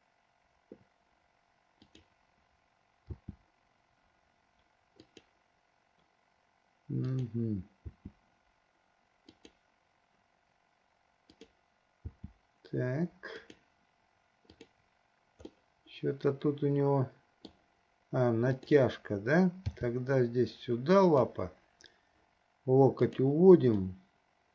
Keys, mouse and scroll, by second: 1.9 click, 3.3 r, 7.1 click, 8.1 r, 11.3 click, 12.3 r, 14.8 click, 15.9-17.8 middle drag, 18.8 click, 19.8 g, 23.1 click, 24.1-24.5 middle drag.